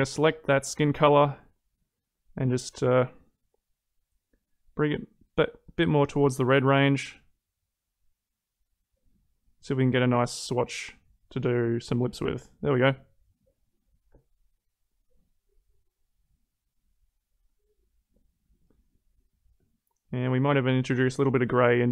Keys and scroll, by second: 14.5 ctrl+z.